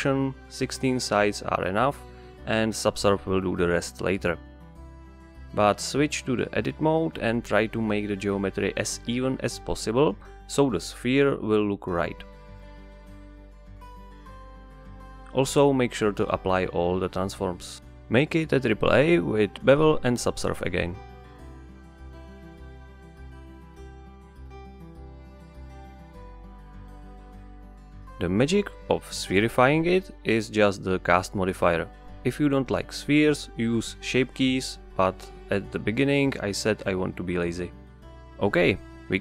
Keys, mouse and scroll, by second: 3.1 click, 4.2 s, 6.7 scroll up 1, 7.2 Tab, 7.8 KP_Divide, 8.8 ctrl+r, 9.5 right click, 9.9 3, 10.1 click, 10.4 middle click, 10.7 shift+click, 12.0 click, 12.5 ctrl+r, 13.3 right click, 13.5 middle click, 14.0 ctrl+r, 14.5 right click, 15.1 Tab, 15.2 KP_Divide, 15.8 right click, 17.4 ctrl+a, 18.5-21.4 drag, 22.7 click, 24.4 click, 26.2 drag, 27.1 click, 28.2 click, 30.7 click, 32.1-33.7 drag, 33.8-36.8 drag.